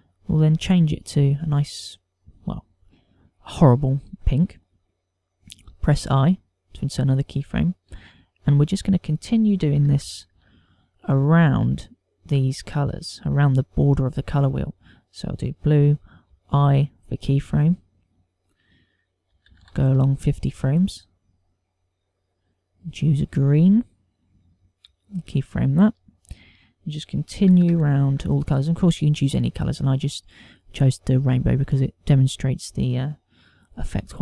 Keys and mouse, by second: 0.3 click, 6.6 i, 9.4 ctrl+click, 12.3 click, 19.3 click, 22.1 click, 25.8 i, 27.2 ctrl+click, 30.0 click.